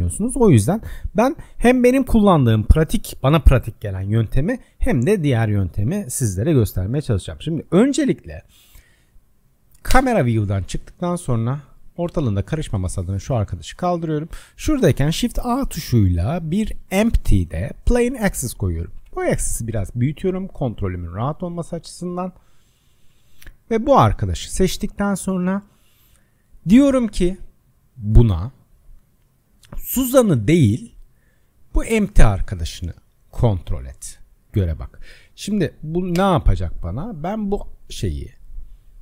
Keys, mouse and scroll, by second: 9.4 click, 9.9 KP_0, 10.9 middle click, 10.9-12.4 scroll down 12, 12.4 click, 12.8 Delete, 13.4-14.8 scroll up 11, 14.8 shift+a, 19.0 s, 21.3-22.6 middle drag, 22.6 click, 23.8-26.9 middle drag, 28.2 click, 30.2 click, 31.0 click, 36.2 KP_0, 37.5 click.